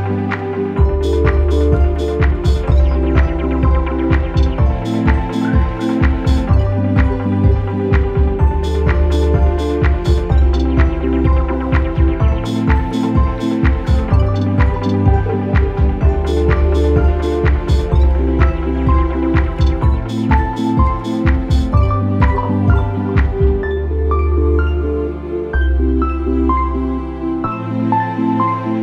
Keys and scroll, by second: 0.9 ctrl+=, 3.7 p, 6.5 ctrl+-, 8.7 ctrl+=, 16.4 ctrl+=, 16.6 ctrl+=, 20.7 ctrl+shift+[, 24.2 alt+[, 24.9 Left.